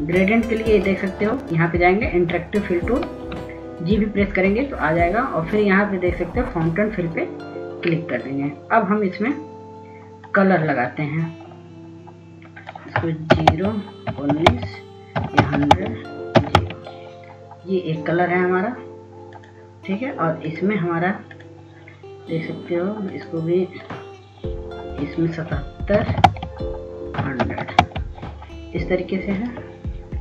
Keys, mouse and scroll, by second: 2.9 s, 4.9 s, 8.2 click, 15.0-18.0 typing, 15.2 Tab, 16.2 Tab, 17.4 Tab, 18.2 Tab, 21.0 click, 27.8 KP_7, 28.0 Tab, 28.8 KP_1, 29.0 KP_0, 29.4 Tab.